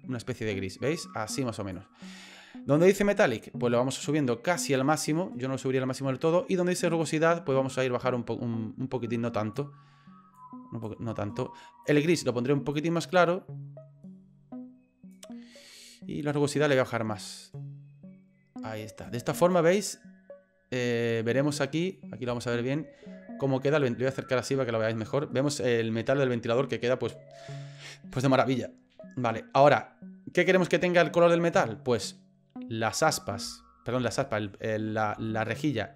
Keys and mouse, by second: 3.3-4.8 drag, 7.1-9.6 drag, 10.3 click, 11.9 click, 16.8-19.0 drag, 19.4 right click, 22.3 shift+middle click, 22.7 shift+click, 22.9 shift+middle click, 23.0 shift+middle click, 24.0 shift+click, 24.1 shift+middle click, 24.2 shift+click, 24.3 shift+middle click, 32.9 right click, 34.3 middle click, 35.2 shift+right click.